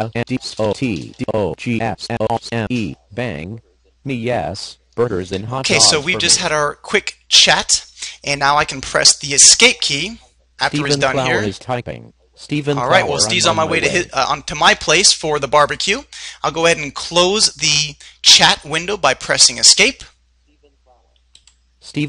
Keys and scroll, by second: 1.3 Return, 18.4 Escape.